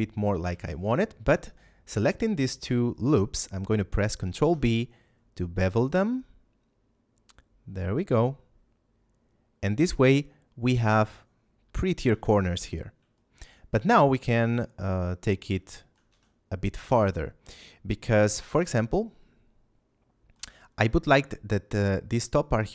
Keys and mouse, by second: 0.7 alt+shift+right click, 4.1 ctrl+b, 10.7 click, 12.0 a, 13.1 shift+middle click, 15.6 shift+middle click, 16.0 a, 17.1 shift+middle click.